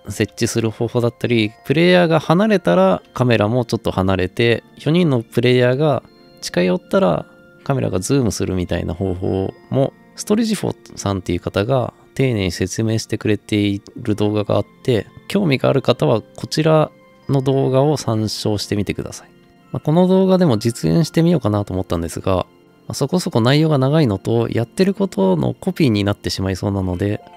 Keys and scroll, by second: 0.0-1.8 typing, 4.3-5.2 typing, 6.2-6.6 typing, 8.3 a, 12.3 d.